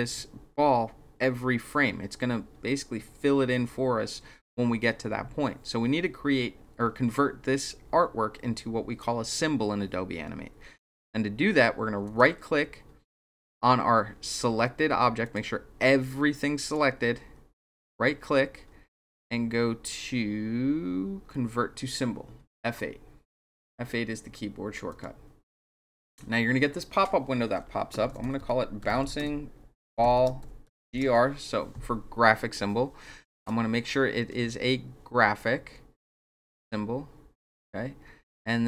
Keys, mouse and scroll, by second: 12.0 right click, 15.2 click, 16.6 click, 17.7 right click, 24.9 click, 27.8-31.3 typing, 33.3 click, 37.4 click.